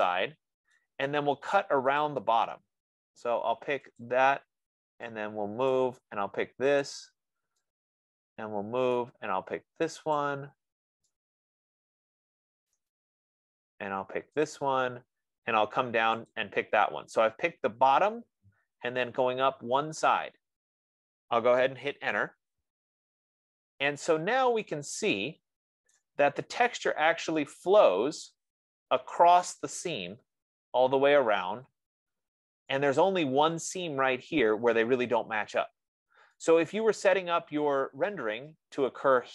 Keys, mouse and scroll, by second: 1.0 right click, 2.1 F15, 2.5 click, 4.5 click, 6.1 right click, 7.2 click, 9.2 right click, 10.5 click, 13.0 right click, 15.0 click, 16.7 click, 22.3 Return, 26.3 right click, 27.0-27.4 scroll, 28.6 right click, 33.2 right click, 38.0 right click, 39.1-39.3 right drag.